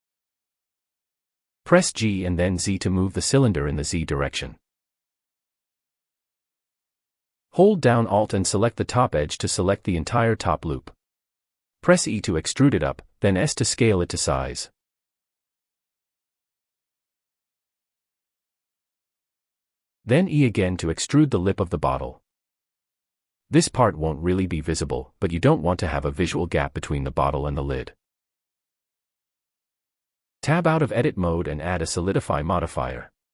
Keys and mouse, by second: 0.8 click, 1.4 g, 2.1 z, 7.5 alt+click, 10.1 e, 15.3 click, 16.4 s, 22.4 click, 23.7 e, 29.0 Tab, 33.0 click.